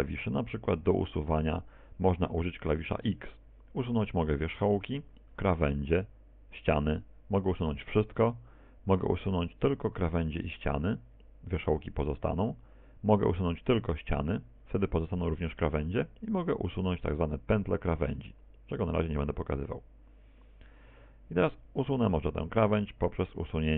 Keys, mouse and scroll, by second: 1.1 right click, 3.0 x, 21.9 x.